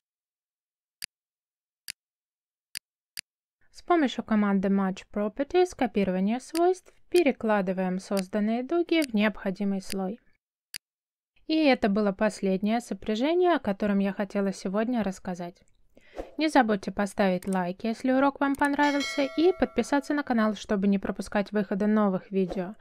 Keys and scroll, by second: 2.2 space, 4.9 m, 6.0 space, 10.2 space.